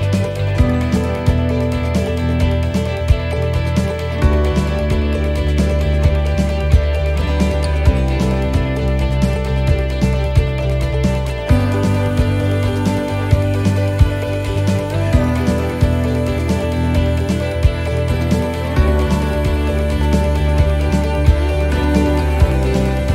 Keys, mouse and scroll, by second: 0.1 shift+middle click, 0.6 middle click, 9.1 shift+d, 10.3 click, 13.9 click, 15.7 middle click, 16.8-17.1 scroll up 2, 17.2 shift+middle click, 18.3 click, 20.5 middle click, 20.9 scroll down 1, 21.3 middle click, 23.0 click.